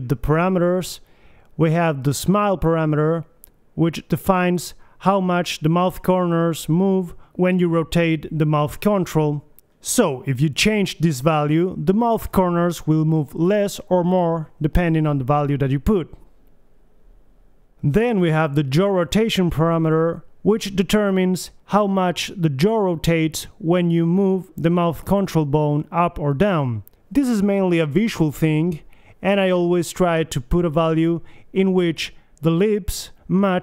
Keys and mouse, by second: 0.8-3.5 drag, 4.1 middle click, 4.7 click, 5.3-7.9 middle drag, 7.9-9.1 right drag, 8.7 r, 9.1 middle click, 11.3 g, 12.3-13.4 drag, 13.4 r, 15.4 click, 16.1 e, 16.8 alt+r, 18.1 click, 18.3 BackSpace, 19.8 alt+r, 20.0-21.6 drag, 20.1 alt+g, 26.9 click, 27.3 g, 29.3 middle click, 29.5 KP_3, 30.8 g, 31.4 click, 31.7 click, 31.9 KP_1, 32.3 alt+g, 33.5 g.